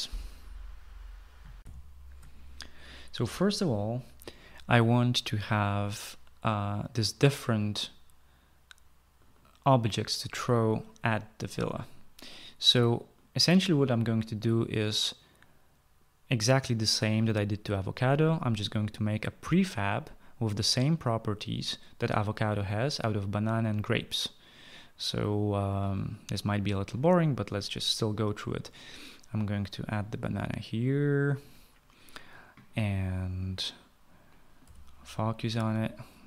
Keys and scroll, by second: 2.4 shift+F9, 4.5 shift+F9, 35.4 f.